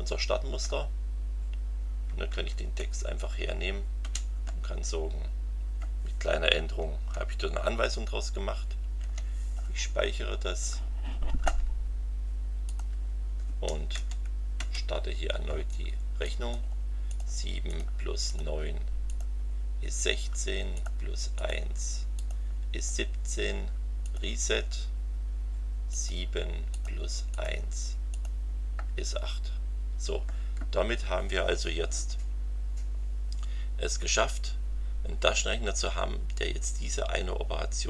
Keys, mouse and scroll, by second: 0.6 Right, 2.8 Delete, 3.3 End, 4.0 BackSpace, 8.8 ctrl+s, 12.7 click, 13.9 Up, 16.2-16.7 drag, 17.1 click, 17.7 click, 18.3 click, 19.1 click, 20.7 click, 21.3 click, 22.1 click, 24.0 click, 25.9 click, 26.7 click, 27.3 click, 28.1 click.